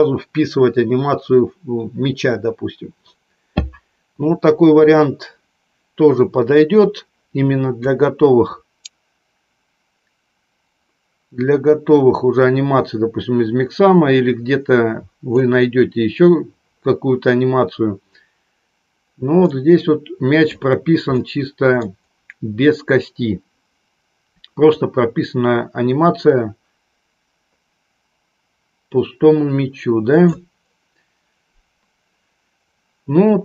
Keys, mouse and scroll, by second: 8.0-15.5 drag, 19.4-20.5 middle drag, 21.2 middle click, 24.9-30.5 drag.